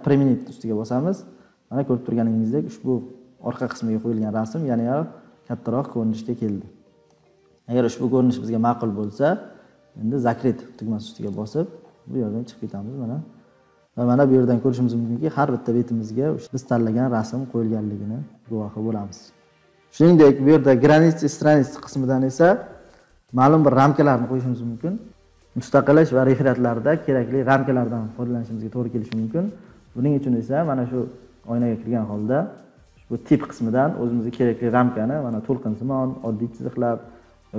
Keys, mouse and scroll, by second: 0.5 click, 9.0 click, 11.3 click, 11.8 scroll, 11.9-12.4 scroll up 15, 12.7-13.2 scroll down 19, 13.9 scroll up 3, 14.1-15.9 scroll, 17.0-19.0 scroll.